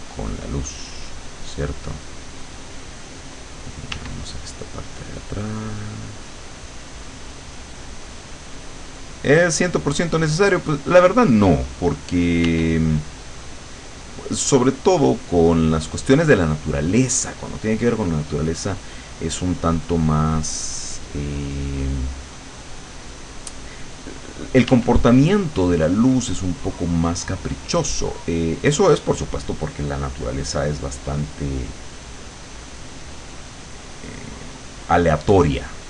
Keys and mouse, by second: 3.9 w, 4.4-8.4 drag, 8.6-9.6 drag, 12.5 w, 13.0-14.1 drag, 14.4-15.9 drag, 16.8-19.0 drag, 20.5-23.3 drag, 24.7 w, 25.4-34.9 drag, 35.3-35.8 drag.